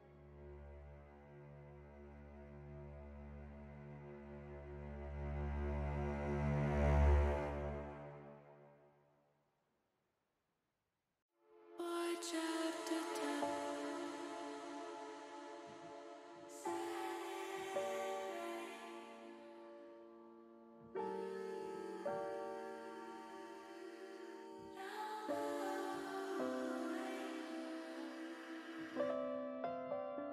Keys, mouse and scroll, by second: 1.3 middle click, 1.6 middle click, 2.7 middle click, 4.2 middle click, 4.9 shift+middle click, 5.3 middle click, 6.2 KP_7, 7.6 shift+middle click, 9.4 shift+middle click, 10.9 r, 12.5 click, 13.0 scroll up 1, 13.1 middle click, 13.7 scroll down 1, 15.9 KP_7, 18.1 e, 19.3 click, 19.7 ctrl+z, 20.1 ctrl+z, 20.9 e, 22.7 click, 23.9 click, 25.2 r, 27.2 click, 27.9-29.0 drag, 29.5 middle click.